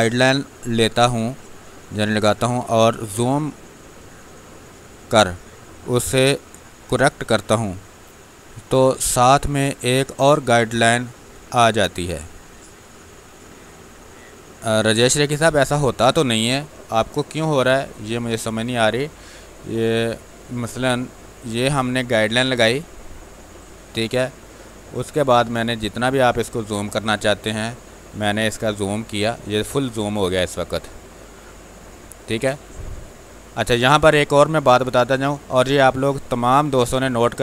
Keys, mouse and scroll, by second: 20.1 space, 21.3-24.1 drag, 24.1 space, 24.2-27.1 ctrl+drag, 27.1-30.1 drag, 30.1-37.4 ctrl+drag.